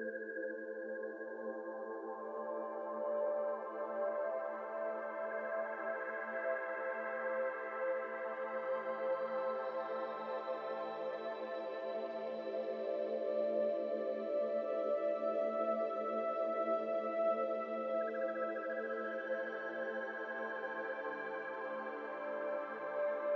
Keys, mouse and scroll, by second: 0.7 alt+shift+click, 1.6 alt+shift+click, 2.3 alt+shift+click, 2.5 middle click, 3.1-3.5 scroll up 2, 3.5 ctrl+b, 4.8 alt+z, 5.0 middle click, 5.4 alt+click, 6.0 f, 6.8 alt+z, 7.4 ctrl+z, 7.9 alt+click, 8.7 f, 9.0 alt+z, 9.3 alt+click, 9.7 f, 10.1 alt+z, 10.3 shift+middle click, 10.7 alt+click, 11.2 alt+z, 11.8 f, 12.1-12.7 scroll down 1, 12.7 alt+shift+click, 13.2 alt+shift+click, 13.6 alt+shift+click, 13.9 alt+z, 14.3 ctrl+b, 16.7 Tab, 16.8 scroll down 1, 16.9-17.3 middle drag, 17.3 click, 17.6 scroll down 1, 17.7-18.5 middle drag, 18.5 ctrl+s, 18.9-21.2 shift+middle drag, 21.2 click, 21.4-22.1 right drag, 22.1-22.4 shift+middle drag, 22.4 click, 23.2 ctrl+s.